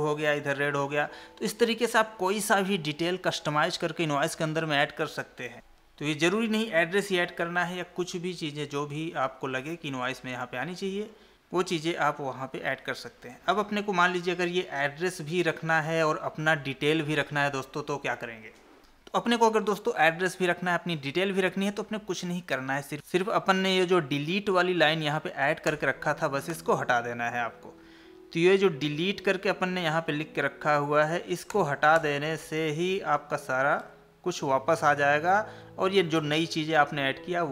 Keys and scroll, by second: 12.9 Tab, 33.8 ctrl+s, 36.3 alt+Tab.